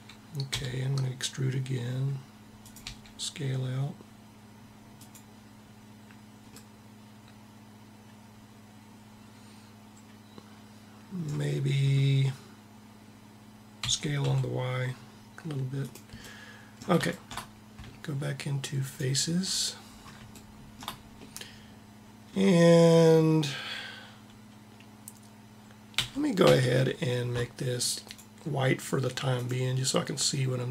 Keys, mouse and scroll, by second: 0.2 e, 2.5 s, 6.6-7.8 middle drag, 13.5 s, 18.5 click, 19.0-20.4 middle drag, 25.7 a, 26.1 a, 27.7-30.7 drag.